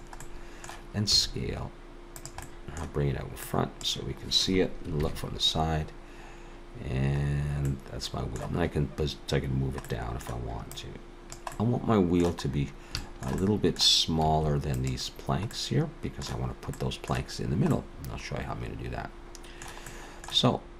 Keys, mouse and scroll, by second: 0.2 middle click, 1.1 s, 2.4 middle click, 3.4 click, 5.0 ctrl+KP_3, 7.7 middle click, 9.8 middle click, 10.7 click, 11.5 middle click, 12.5-12.8 scroll up 1, 13.0 shift+middle click, 13.4 middle click, 14.3 s, 15.5 middle click, 16.8 middle click, 17.7 middle click, 19.9 middle click.